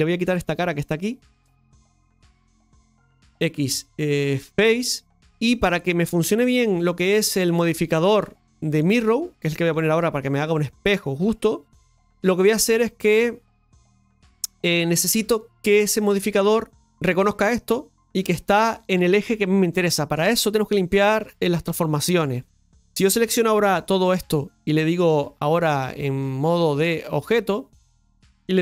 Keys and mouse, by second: 0.2 Tab, 0.8-1.8 right drag, 1.8 click, 2.5-4.9 right drag, 4.9 x, 5.2-7.5 middle drag, 12.0-15.1 middle drag, 22.4 middle click, 23.6 a, 26.8 click, 27.8-28.3 middle drag, 28.3 ctrl+s.